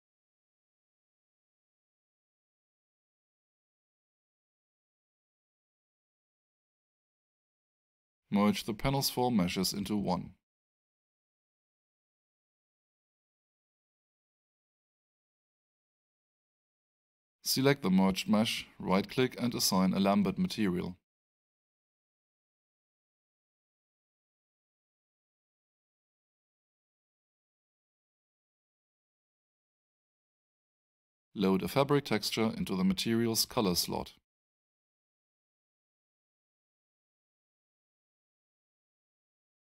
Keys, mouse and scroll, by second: 1.7 alt+click, 2.5 alt+middle click, 3.3 alt+right click, 4.9 click, 9.2 click, 12.7 click, 13.7 alt+click, 19.4 right click, 24.5 click, 27.6 click, 31.8 click, 35.0 click, 38.6 click.